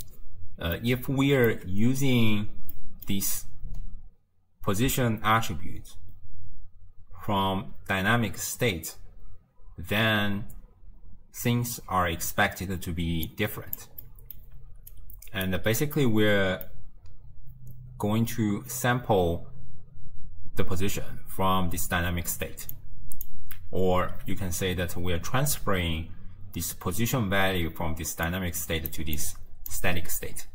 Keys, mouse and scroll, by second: 0.8-1.9 middle drag, 1.9-2.8 scroll down 1, 2.8-5.8 middle drag, 13.3 click, 14.1 middle click, 14.6 d, 15.0-15.5 right drag, 15.5 d, 16.0-19.0 middle drag, 20.3-22.7 d, 22.8-23.3 drag, 23.3 d, 27.7 d, 28.3 d, 28.3 click, 29.0 d, 29.2-29.7 drag, 29.7 d.